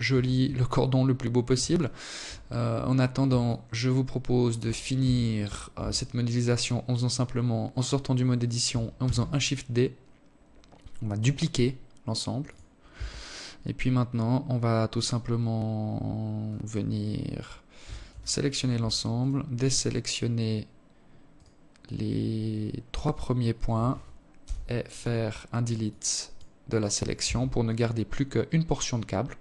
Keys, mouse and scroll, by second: 0.2 alt+shift+click, 1.8 alt+shift+click, 3.4 Tab, 4.2 Tab, 7.4 shift+d, 11.3 Tab, 16.2 a, 16.5 a, 17.6 shift+right click, 19.8 shift+right click, 21.3 shift+right click, 22.8 Delete, 25.6 Tab, 28.8 Tab.